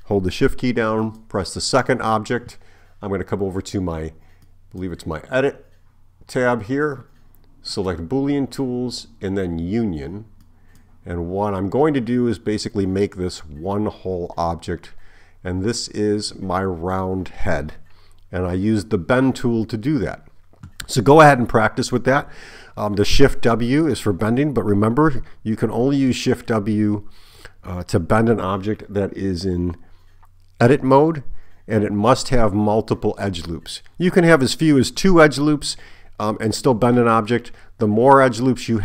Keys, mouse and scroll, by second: 1.0 shift+click, 4.5 click, 7.7 click, 10.5 click.